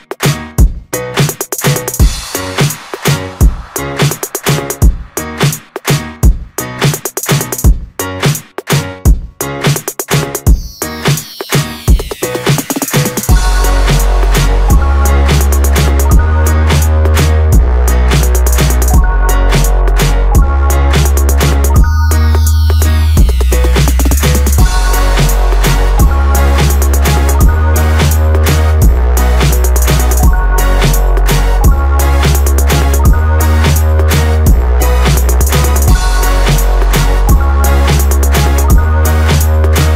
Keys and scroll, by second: 4.2 Return, 8.1 Return, 13.7 Return, 19.5 Return, 25.9 Return, 32.0 Return, 36.6 Return.